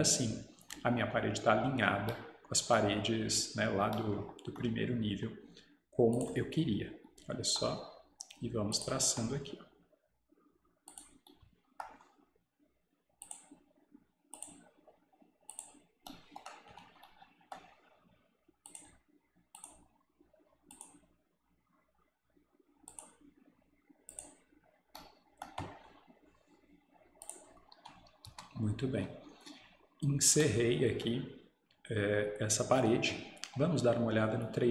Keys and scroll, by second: 28.3 Escape.